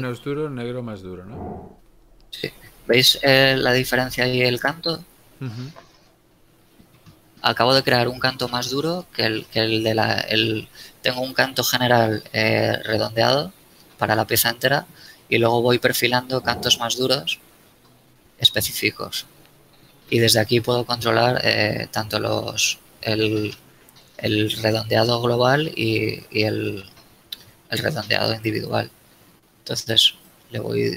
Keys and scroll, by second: 0.4 Tab, 26.7 Tab.